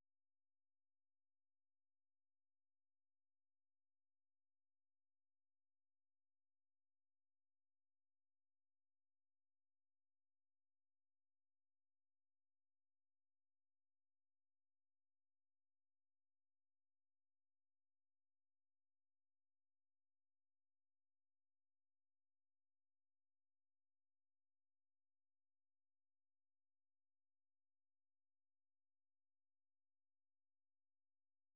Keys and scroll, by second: 9.8 super+1, 12.6 typing, 14.6-16.4 typing, 17.0 super+3, 26.4 super+2, 28.4 ctrl+t, 29.0-31.5 typing.